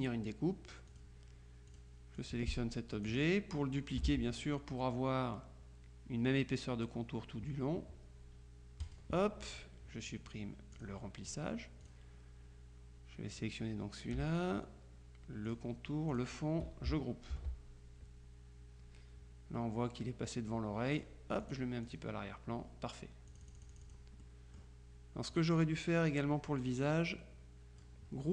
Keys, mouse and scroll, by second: 1.0 click, 1.8 click, 4.1 ctrl+z, 8.9 click, 10.8 click, 11.9 click, 13.4 click, 15.5 shift+click, 16.2 click, 17.4 ctrl+g, 21.0 click, 23.4 click, 25.4 click, 26.7-28.3 drag.